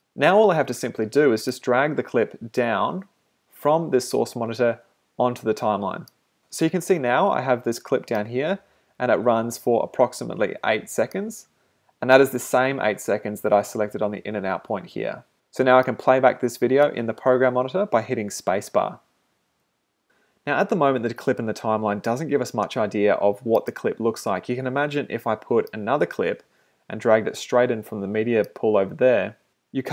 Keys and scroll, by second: 19.5 space.